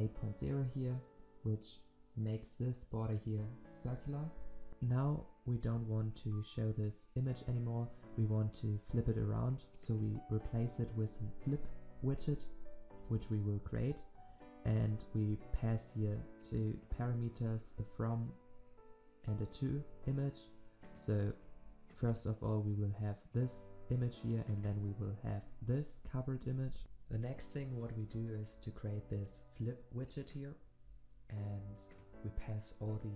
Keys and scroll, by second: 12.2 ctrl+v.